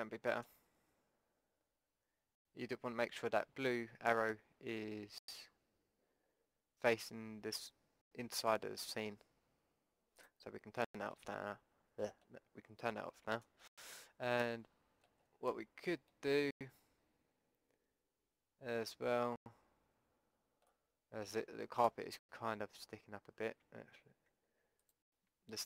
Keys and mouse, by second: 3.2 Tab, 10.2-12.2 drag, 11.3 Tab, 15.8 middle click, 17.3 middle click, 20.0 middle click, 23.6 Tab, 24.3 Tab, 24.8-25.6 drag, 25.3 Tab.